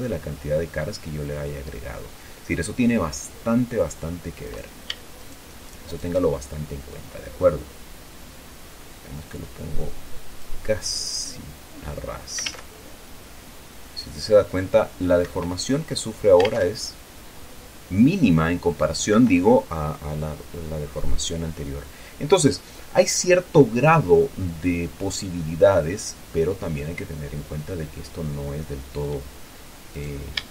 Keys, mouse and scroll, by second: 1.7-2.1 scroll down 1, 2.1-4.2 drag, 4.8 right click, 5.2 shift+right click, 6.2 shift+right click, 7.2-11.0 drag, 11.0-11.3 scroll down 1, 11.3 middle click, 11.6 click, 12.8 alt+a, 15.6 Escape, 19.5 Escape, 26.0-28.0 drag, 30.3 right click.